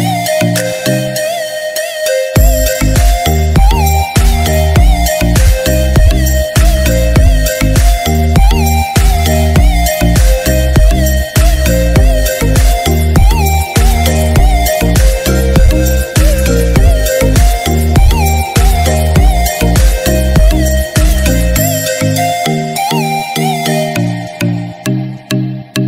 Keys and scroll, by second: 25.5 ctrl+-.